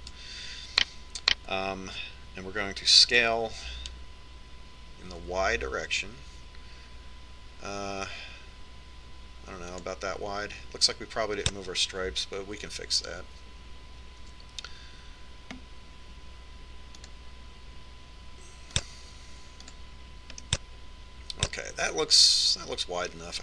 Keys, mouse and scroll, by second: 0.7-2.9 right drag, 4.7 s, 15.9 z, 18.7-22.2 drag, 22.1-23.4 middle drag.